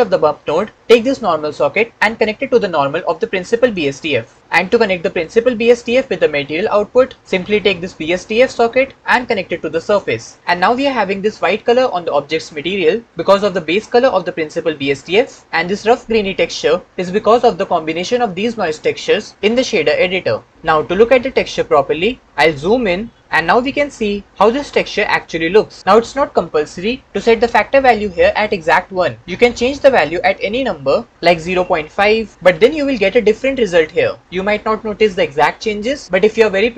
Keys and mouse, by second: 1.9-3.7 right drag, 5.0 right click, 9.3-10.1 right drag, 23.4-25.0 shift+middle drag, 29.8-30.9 middle drag, 30.9 click.